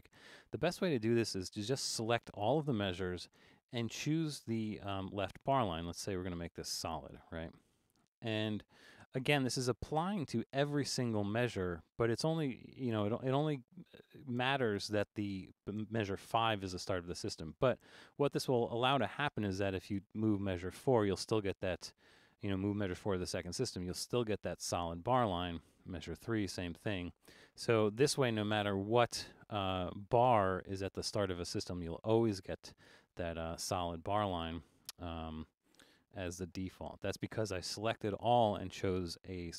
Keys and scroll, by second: 2.6 Return, 20.0 Down, 25.7 Down, 27.1 Up, 31.4 Down, 33.2 super+a, 35.9 Return.